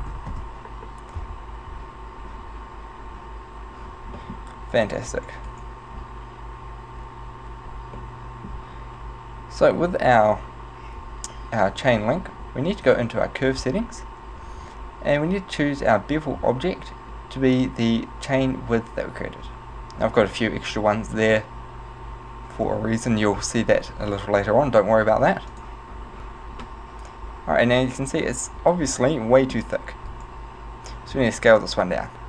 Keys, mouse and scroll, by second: 4.2 middle click, 4.8 right click, 5.2 right click, 5.5 right click, 8.0 middle click, 12.9 click, 15.9 click, 26.7 middle click, 30.0 right click, 31.0 s.